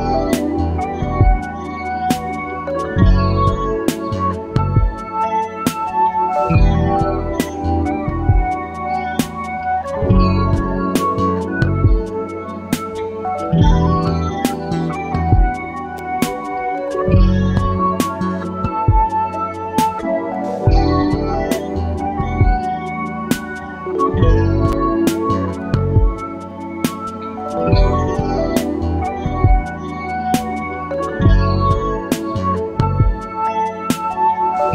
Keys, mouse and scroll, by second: 0.6 shift+click, 1.3 shift+click, 3.5 click, 4.6 KP_6, 4.9 KP_Enter, 7.0-7.8 ctrl+scroll up 4, 8.9 click, 11.7-13.1 drag, 14.0 click, 15.6-17.3 drag, 18.3 click, 24.7-26.2 drag, 28.0-29.4 drag, 30.6 click, 32.5 ctrl+z, 33.7 click.